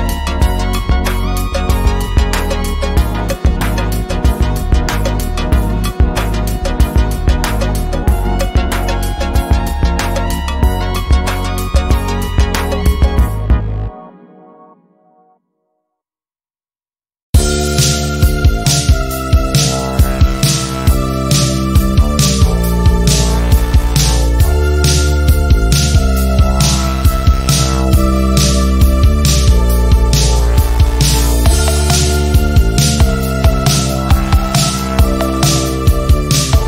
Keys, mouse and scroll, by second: 5.3 r, 5.7-8.9 drag, 10.4-11.0 drag, 14.0-16.2 drag, 20.1 ctrl+z, 21.9 click, 28.2 click, 32.4 r, 33.0-33.6 click, 33.8 v, 34.4 shift+click, 35.4-36.6 drag.